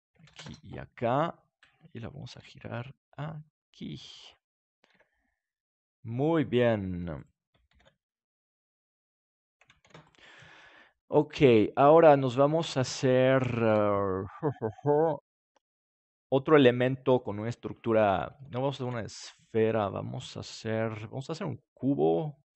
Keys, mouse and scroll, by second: 2.3 r, 4.3-5.9 drag, 4.9 g, 6.3-8.3 drag, 7.2-8.9 right drag, 7.7 shift+d, 9.4-11.0 drag, 9.8 ctrl+s, 13.6 KP_7, 18.3 middle click, 18.8-20.8 drag.